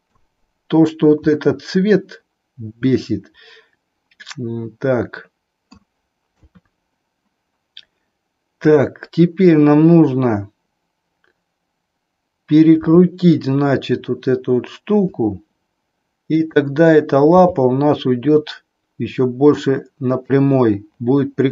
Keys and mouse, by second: 1.2-5.9 middle drag, 6.4 KP_3, 8.5-9.5 drag, 12.8 r, 16.2-17.4 drag, 17.4 g.